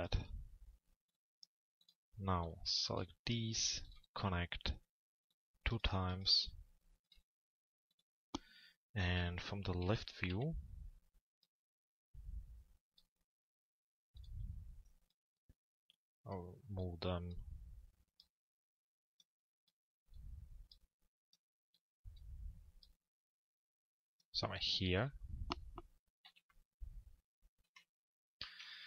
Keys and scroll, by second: 9.6 l, 10.3 z, 24.6 p, 26.2 z, 27.6 p.